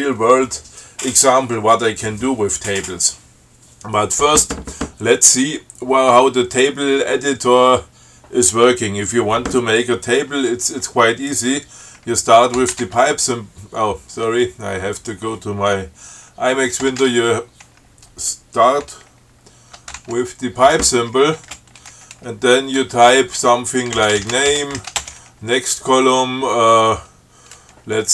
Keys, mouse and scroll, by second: 13.1 alt+<, 15.2 click, 20.2 alt+<, 21.7 space, 24.1-25.1 typing.